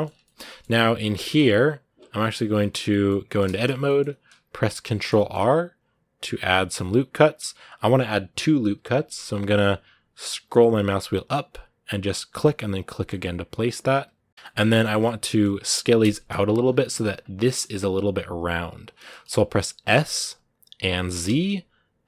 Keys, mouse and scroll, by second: 0.0 shift+middle click, 0.6 right click, 0.8 middle click, 0.9 Tab, 1.8 Tab, 2.4-6.1 shift+middle drag, 6.1 ctrl+r, 12.9-14.3 middle drag, 14.3 scroll down 3, 14.7-16.4 shift+middle drag, 16.4 scroll up 2, 17.3-19.7 middle drag, 19.7 s.